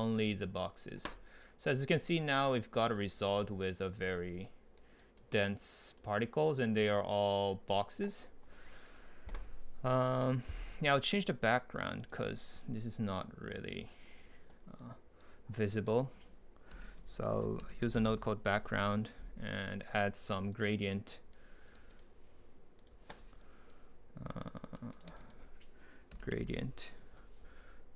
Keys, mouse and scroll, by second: 6.8-9.4 right drag, 10.4-11.8 right drag, 11.8-12.4 drag, 12.4 right drag, 15.0-16.9 drag, 16.9 Delete, 18.8 Return, 19.8-22.9 drag, 22.9 Delete, 23.4-24.9 drag, 24.9 right click, 25.1-27.2 drag, 27.2 Return.